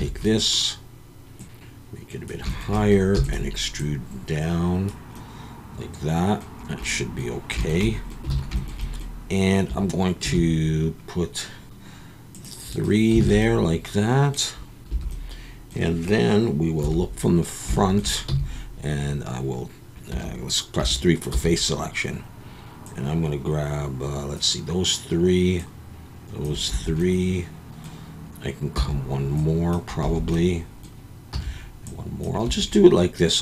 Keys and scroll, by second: 0.0 a, 3.1 e, 8.3 alt+a, 10.2 ctrl+r, 13.2 alt+a, 14.9 3, 16.8 KP_1, 18.3 c, 20.8 3, 21.3 c, 26.7 Escape, 28.7 c, 30.0 Escape, 31.3 c, 32.5 Escape.